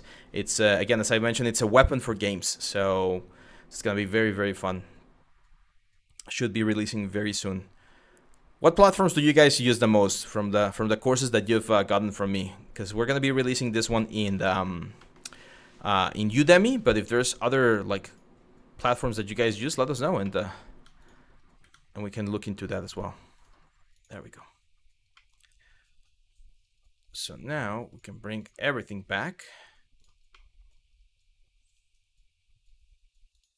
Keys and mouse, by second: 13.9 middle click, 14.7 middle click, 15.9 click, 17.7 click, 18.8 click, 20.4 Tab, 21.3 Tab, 22.5-23.1 drag, 23.6 click, 24.8 middle click, 27.5 click, 28.0 click, 29.6 click, 30.1 middle click.